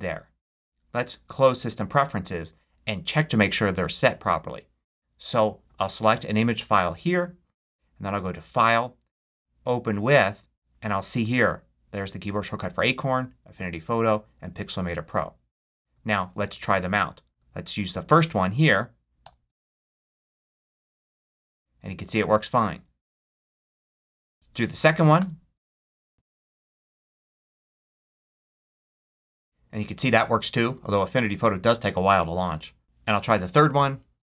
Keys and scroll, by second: 19.1 ctrl+shift+a, 22.6 super+q, 25.1 ctrl+shift+f, 33.7 ctrl+shift+p.